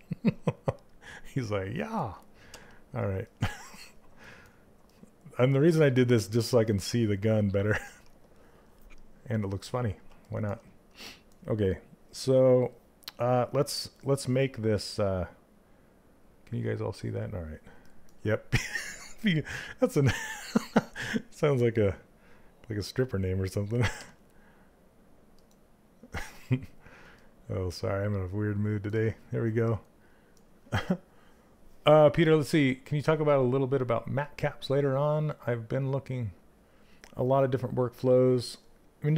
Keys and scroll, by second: 23.5 z, 28.5 z.